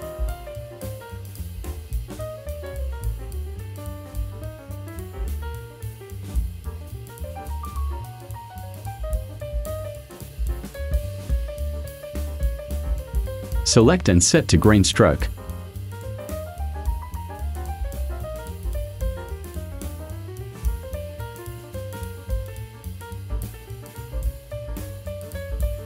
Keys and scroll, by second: 10.9 v, 24.5 ctrl+a.